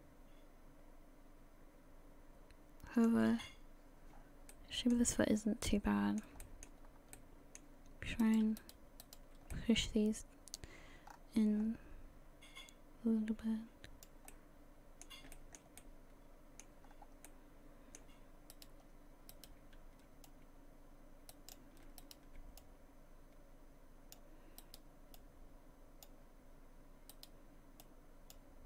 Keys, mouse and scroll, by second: 4.1 scroll down 2, 4.5 middle click, 4.8 scroll down 4, 4.9-5.4 scroll up 3, 5.7 middle click, 6.4 shift+middle click, 6.9 scroll up 1, 7.1 middle click, 8.2 right click, 8.6 shift+right click, 9.0 right click, 9.5 middle click, 10.5 click, 14.3 middle click, 15.3 shift+middle click, 15.8 middle click, 16.8-17.3 scroll up 2, 17.3 middle click, 18.5 right click, 19.3 right click, 20.3 click, 22.0 shift+right click, 22.6 click, 24.6 right click, 25.1 click, 27.1 right click, 27.8 click.